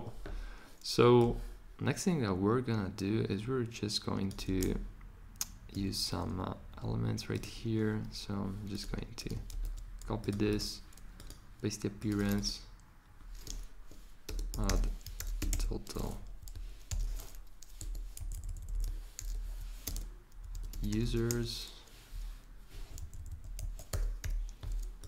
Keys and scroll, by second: 9.5 c, 14.8-17.8 typing, 19.2-21.8 typing, 23.9 BackSpace, 24.2 u.